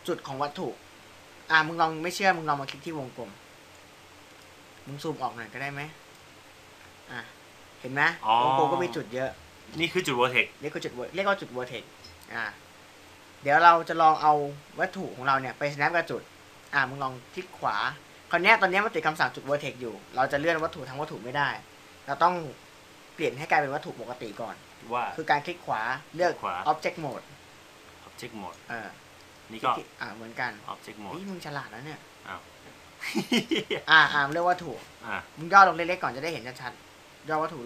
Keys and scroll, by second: 16.9 v.